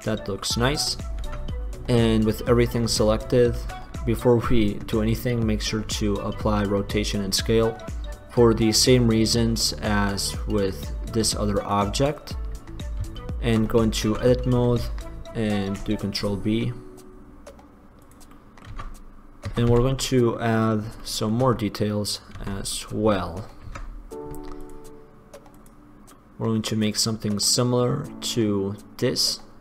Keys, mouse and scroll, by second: 1.4 Tab, 3.9 Tab, 10.1-10.6 middle drag, 10.6-13.7 drag, 13.7 middle click, 14.3 Tab, 15.7 ctrl+b, 18.5 click, 19.1 click, 19.3 click, 19.9 Tab, 22.5 Tab, 23.8 ctrl+r, 25.8-27.6 drag.